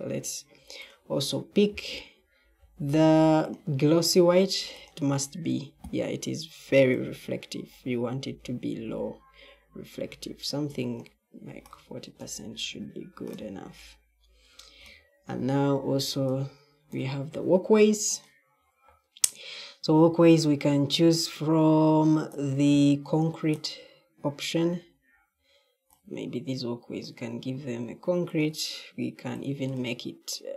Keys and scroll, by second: 14.7 e, 15.9 e.